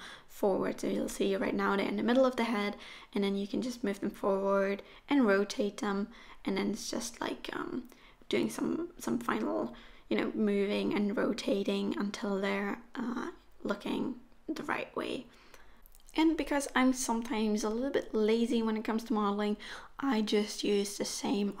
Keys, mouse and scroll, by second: 1.2 middle click, 2.3 scroll down 2, 2.6 middle click, 5.9 alt+z, 6.0 scroll up 2, 6.2 shift+middle click, 6.4 click, 6.8-14.4 typing, 8.3-8.9 scroll up 2, 9.5 click, 11.6 click, 13.2 click, 14.9 scroll down 4, 15.0 click, 15.1 middle click, 15.8-17.8 typing, 15.9 click, 18.2 scroll up 6, 18.4 middle click, 18.6 scroll down 6, 18.7 middle click, 19.0 middle click, 19.5 r, 19.8 middle click, 20.1 click, 20.3 middle click, 20.4 scroll down 2, 20.5 click, 20.6 middle click, 21.1 scroll down 2, 21.3-21.6 scroll up 11.